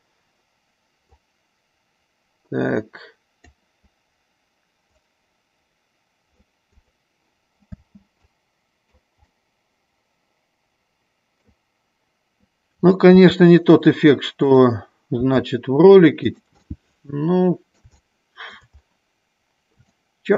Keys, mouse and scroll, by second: 0.0 click, 1.5-3.8 drag, 5.2-6.7 drag, 7.1 click, 8.0 space, 8.6 click, 9.4-11.7 middle drag, 13.4 g, 14.6 click, 15.5 g, 16.9-18.8 middle drag, 20.1 shift+middle click.